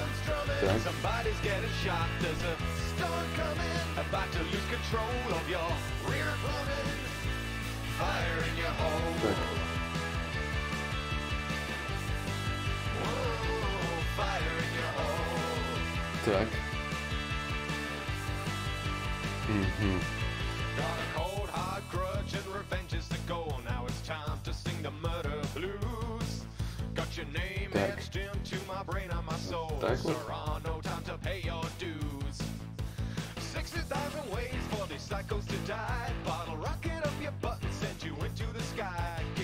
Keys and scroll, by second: 7.2 ctrl+z, 7.4 ctrl+z.